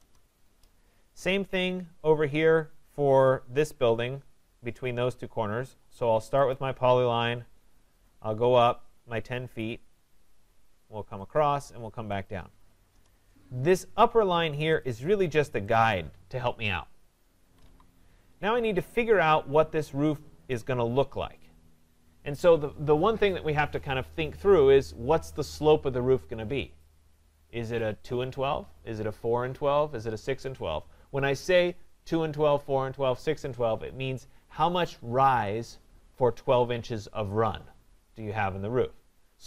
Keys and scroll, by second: 0.0 Return, 12.9 Return, 17.4 Escape.